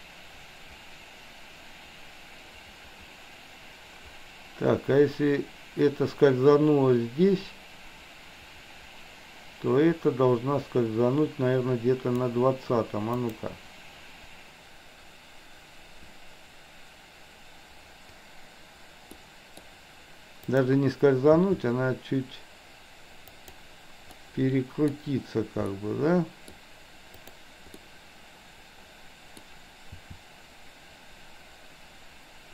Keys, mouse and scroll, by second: 13.2 click, 19.2 middle click, 20.6 click, 21.5 r, 24.1-25.0 middle drag, 25.7-26.6 middle drag, 27.2 click, 27.8-29.5 middle drag, 30.0 r.